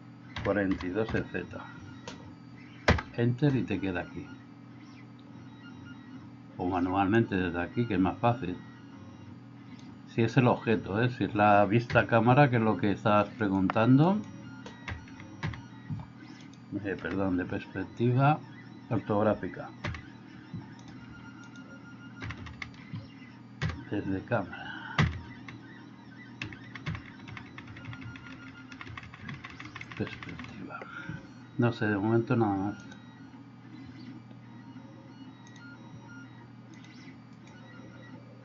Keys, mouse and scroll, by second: 7.2-9.8 drag, 12.0 KP_0, 14.9 KP_4, 15.2 KP_4, 15.5 KP_4, 16.5 click, 17.0 KP_1, 19.9 KP_1, 20.9 drag, 21.1 Escape, 22.2 KP_1, 22.4 KP_1, 22.6 KP_1, 22.8 Escape, 23.6 KP_0, 25.1-30.4 typing, 31.1 Escape.